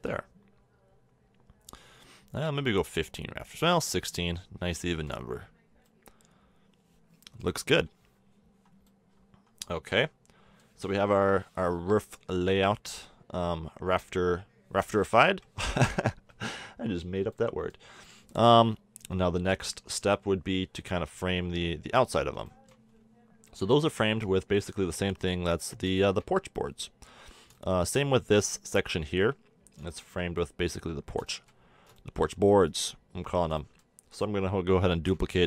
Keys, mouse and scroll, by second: 0.0-2.3 middle drag, 2.3-5.8 drag, 6.1-7.7 middle drag, 7.7 KP_1, 9.6-10.3 middle drag, 11.1 KP_7, 15.2 KP_1, 15.6 middle click, 16.3 z, 21.1-23.7 middle drag, 23.7 Tab, 24.1 Tab, 25.1 Tab, 32.3 Tab, 34.9 shift+d.